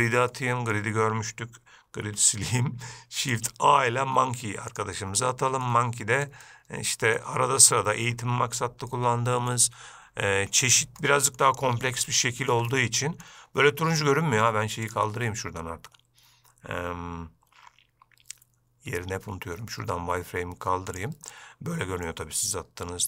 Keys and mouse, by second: 0.6-1.0 middle drag, 2.3 x, 3.6 shift+a, 5.9-6.5 middle drag, 6.7-7.5 middle drag, 8.0-8.3 shift+middle drag, 9.2-9.8 middle drag, 11.3-11.7 middle drag, 12.3-12.8 ctrl+middle drag, 13.0-13.5 middle drag, 15.1-21.4 drag, 21.6-22.3 middle drag.